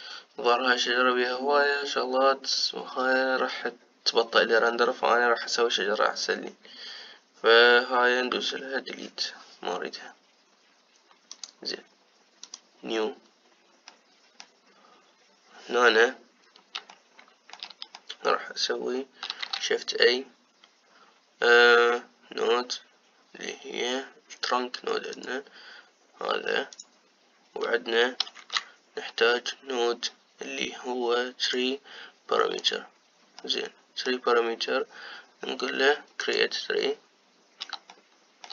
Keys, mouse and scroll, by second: 9.3 Delete, 17.7-37.1 shift+middle drag, 37.1-38.5 drag.